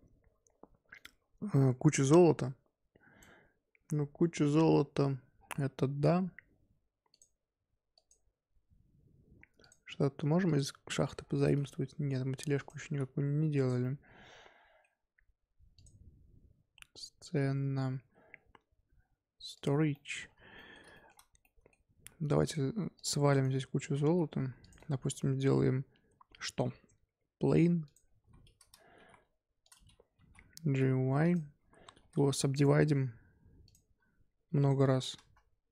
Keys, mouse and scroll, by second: 3.6-4.5 scroll down 1, 4.5-5.3 scroll down 3, 5.3-7.1 scroll down 2, 7.1-9.7 drag, 11.0-12.1 scroll up 9, 12.1-12.5 scroll down 1, 12.5 click, 12.8 z, 13.6 click, 13.8-15.7 middle drag, 15.7 click, 19.9 middle drag, 20.1 scroll down 1, 20.2-20.5 scroll up 1, 20.5-21.1 middle drag, 21.1 scroll up 4, 21.4-22.4 middle drag, 22.4 shift+click, 22.9 click, 23.3-24.0 shift+right drag, 24.0 z, 24.6 click, 24.9 shift+a, 28.3-28.9 scroll up 1, 28.9 g, 30.1 g, 31.4 Tab, 31.5-32.1 scroll up 2, 32.1 Tab, 32.4 Tab, 32.5-34.6 right drag, 34.6-35.7 drag.